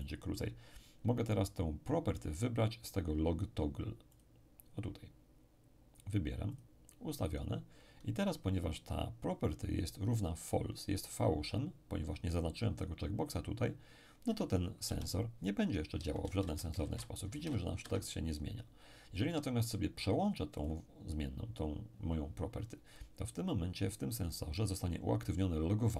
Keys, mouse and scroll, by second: 0.0 shift+click, 4.1 click, 6.5 click, 14.8 p, 15.9-17.3 typing, 17.8 Escape, 20.6 click.